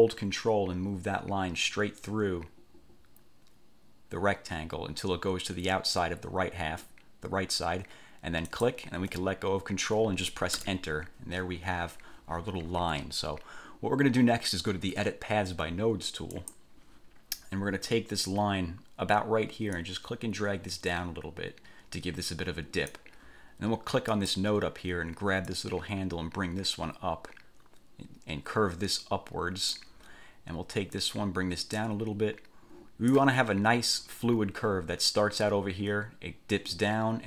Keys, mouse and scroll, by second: 8.7 ctrl+click, 10.8 Return, 16.5 click, 20.0-23.3 drag, 24.3 click, 25.7-30.1 drag, 31.2-33.5 drag.